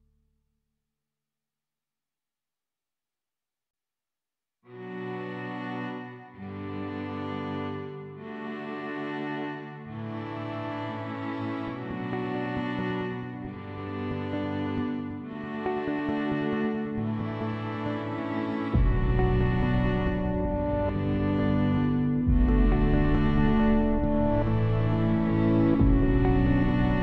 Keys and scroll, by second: 1.8 ctrl+s, 8.1-9.9 typing, 10.1 Return.